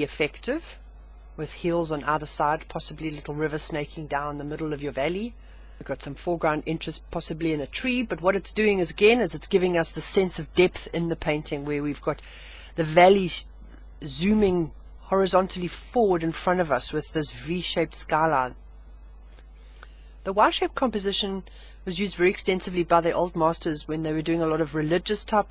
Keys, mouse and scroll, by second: 21.5 scroll down 1.